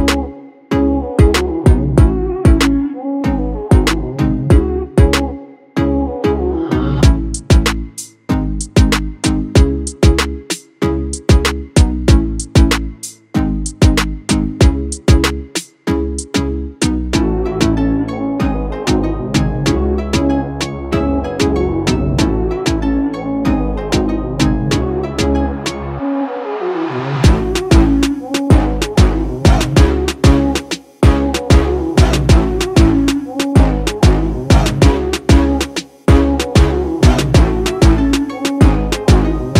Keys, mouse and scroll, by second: 3.0 ctrl+space, 3.2 ctrl+click, 3.5 ctrl+space, 4.2 ctrl+space, 4.9 click, 5.1 space, 5.6 click, 10.0-15.8 drag, 16.9 shift+click, 20.3 space, 20.5 click, 20.8 space, 21.5 ctrl+click, 22.2 space, 22.4 click, 22.8 space, 23.3-24.8 drag, 24.8 space, 25.1 click, 25.4 space, 26.6-28.9 drag, 28.9 right click, 30.1-38.1 drag, 38.7 space, 38.8 click, 39.4 alt+scroll down 1.